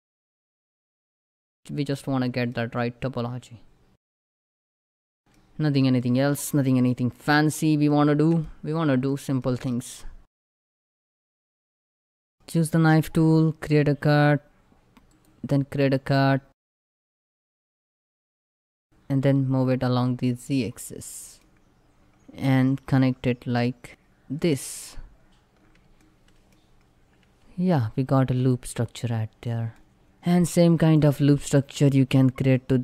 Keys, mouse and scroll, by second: 1.4 scroll down 1, 1.7-4.8 middle drag, 5.7 middle click, 6.2 shift+middle click, 6.2 shift+middle click, 6.7-7.0 scroll up 2, 7.0 middle click, 7.6 shift+middle click, 8.5 scroll down 1, 8.8 shift+middle click, 9.2 scroll up 1.